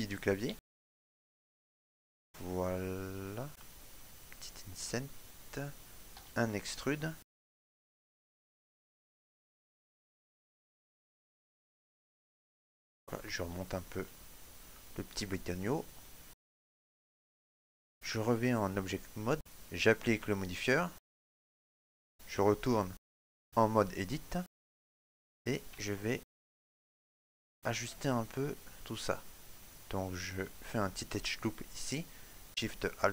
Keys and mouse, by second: 0.6 i, 8.8 middle click, 10.5 shift+middle click, 10.9 middle click, 12.3 click, 13.8 shift+middle click, 14.3 middle click, 16.1 shift+middle click, 17.7 click, 19.3 shift+middle click, 21.3 click, 24.7 shift+middle click, 25.2 middle click, 26.0 ctrl+middle click, 26.6 shift+middle click, 27.3 ctrl+middle click, 28.9 click, 30.3 right click.